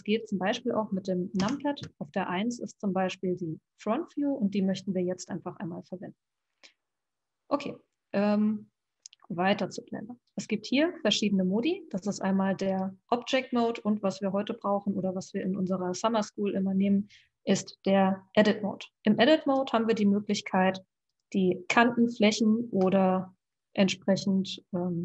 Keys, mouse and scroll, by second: 0.0 click, 1.8 KP_1, 10.4-12.8 drag, 13.5-16.7 drag, 21.2 click, 23.1-25.0 middle drag.